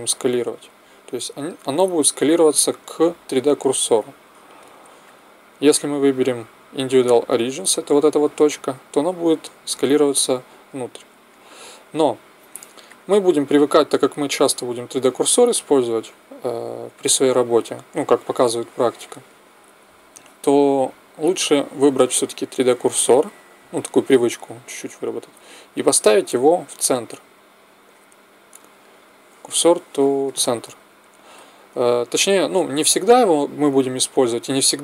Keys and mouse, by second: 0.5 s, 5.1-6.9 drag, 8.9 s, 12.8-14.6 drag, 25.7 shift+s.